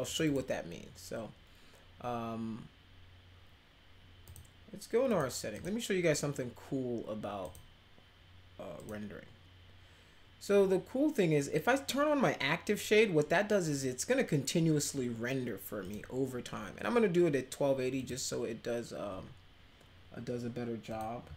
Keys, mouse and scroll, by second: 0.0 click, 0.2 click, 4.2 click, 5.1 click, 5.5 click, 7.4 click, 8.7 click, 15.8 click, 17.9 click, 20.8 click.